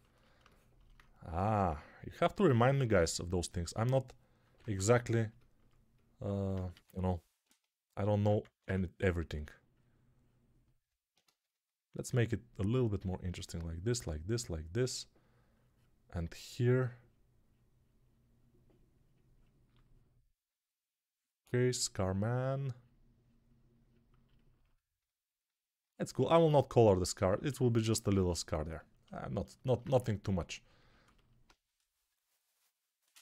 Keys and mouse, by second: 0.0-8.5 typing, 4.4 ctrl+Tab, 10.7-33.2 ctrl+alt+drag, 11.1 ctrl+z.